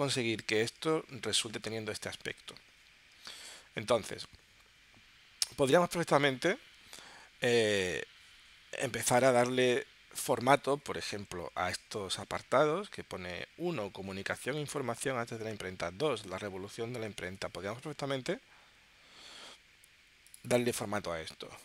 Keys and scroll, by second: 0.7 super+Tab, 3.6 super+Tab, 11.6 super+Tab, 17.2 super+Tab.